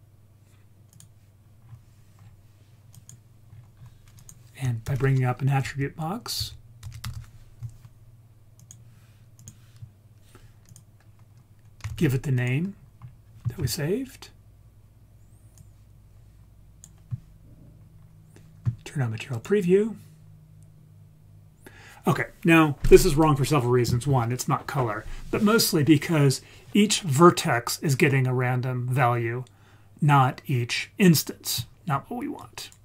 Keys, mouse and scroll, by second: 1.6-2.9 scroll down 4, 2.9 click, 3.5-4.2 scroll up 3, 4.2 click, 4.9 shift+a, 7.1 t, 10.7-12.4 drag, 12.7-13.2 scroll up 4, 15.6-16.9 drag, 17.8-18.6 scroll up 3, 19.4 click, 32.4 click.